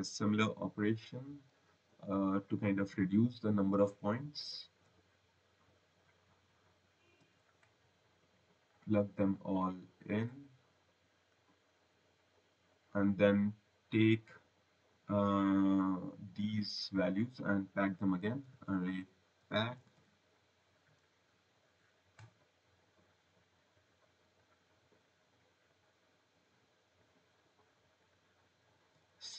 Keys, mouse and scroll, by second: 1.9 click, 2.7 ctrl+c, 4.7 v, 5.9 v, 7.6 click, 8.6 click, 9.6 click, 11.2 click, 12.2 click, 16.0 click, 20.3 typing, 21.5 click, 24.3 click, 25.6 click, 27.9 click, 28.5 click, 29.1 right click.